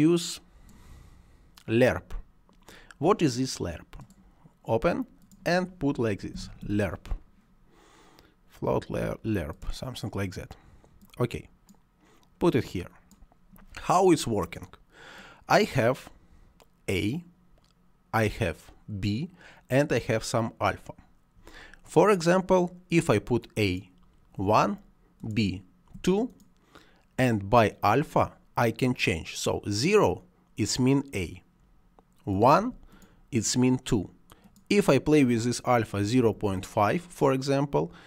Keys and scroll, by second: 6.2 l, 6.4 e, 7.6 r, 24.3 1, 25.8 2, 32.5 1, 35.9 ., 36.1 5, 36.4 Return.